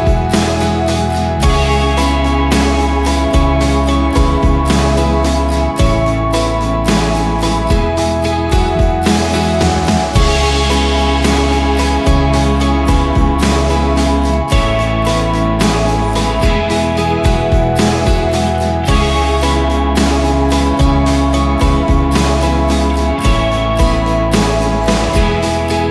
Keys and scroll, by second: 18.2 ctrl+s.